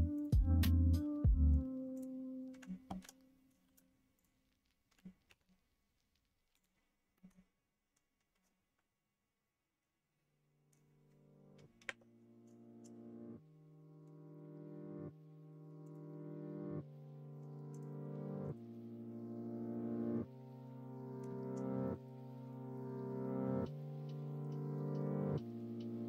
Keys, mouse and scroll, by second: 3.6 shift+g, 5.2 ctrl+e, 7.1 middle click, 11.8 Tab, 15.8 click, 17.7 click, 18.4 click, 18.7-21.2 middle drag, 21.9 shift+click, 23.4-25.0 middle drag.